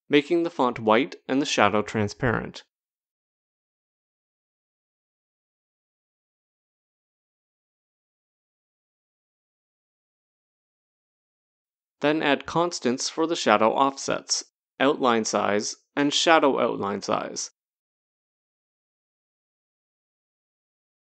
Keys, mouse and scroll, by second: 1.4 click, 2.6 click, 4.0 click, 7.7 Right, 7.8 Right, 8.4-9.9 typing, 12.4 click, 13.0 click, 14.0 click, 18.1 7, 18.5 Tab, 19.0 7, 19.2 Tab, 19.8 7, 20.2 Tab, 20.6 7.